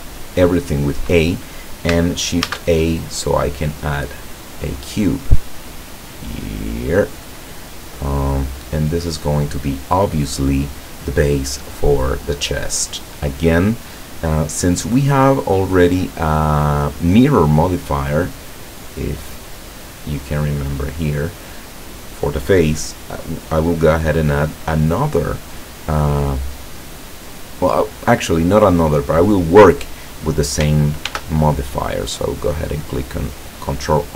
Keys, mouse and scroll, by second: 2.5 shift+a, 4.2 click, 5.7-7.4 drag, 7.5-9.5 middle drag, 14.2-15.5 middle drag, 16.7 click, 18.2 click, 31.2 ctrl+r.